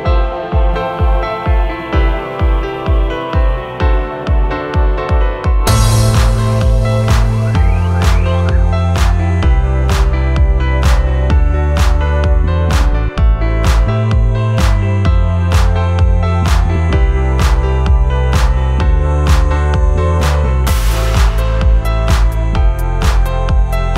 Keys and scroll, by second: 0.0 shift+g, 0.0 Return, 3.4 shift+k, 3.5 shift+n, 3.6 shift+e, 3.7 Return, 5.3 p, 10.4 F1, 11.0 ctrl+d, 11.1 Escape, 11.3 ., 18.0 p, 19.3 F3, 23.8 3.